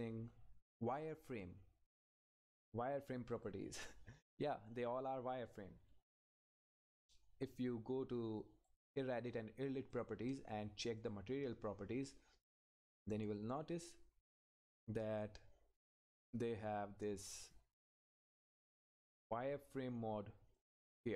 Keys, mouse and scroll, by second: 3.3 click, 8.4 click, 15.1 scroll down 1, 19.7 scroll up 1, 20.5 click.